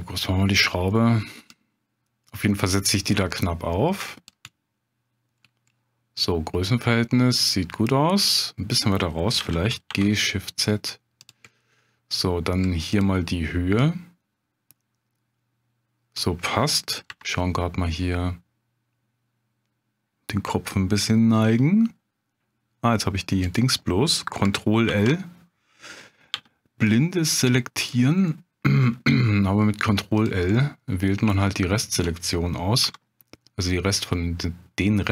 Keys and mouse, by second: 1.5-4.3 drag, 4.5 middle click, 9.4 g, 9.9 shift+z, 11.2 click, 11.5-12.6 drag, 13.8-16.1 drag, 17.1 KP_7, 21.4 g, 24.9 ctrl+l, 26.3 g, 27.8 click, 28.3-29.3 drag, 30.2 click, 30.5 middle click, 31.4 shift+click, 32.8 s.